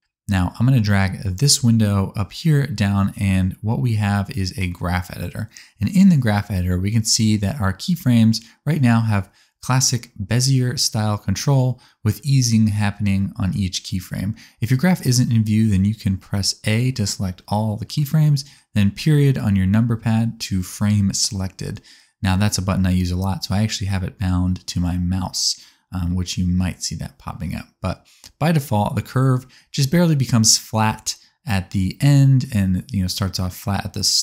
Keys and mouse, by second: 0.0-2.0 drag, 0.0-2.0 right drag, 1.7 space, 10.7 space, 11.7-13.6 drag, 11.7-12.9 middle drag, 11.7-12.9 right drag, 13.5 middle click, 13.5 right click, 14.6-16.1 drag, 14.6-16.1 middle drag, 14.6-16.1 right drag, 16.1 a, 22.1 space, 23.2 space, 29.9-34.2 drag, 31.4 middle click, 31.4 right click, 31.6 s.